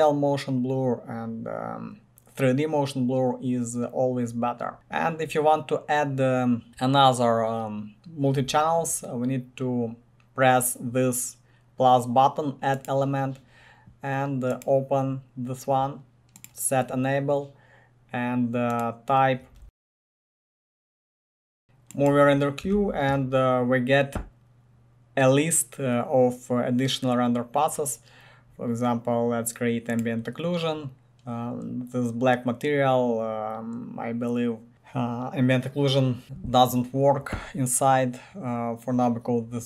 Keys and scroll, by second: 19.7-21.8 typing, 22.7 ctrl+c.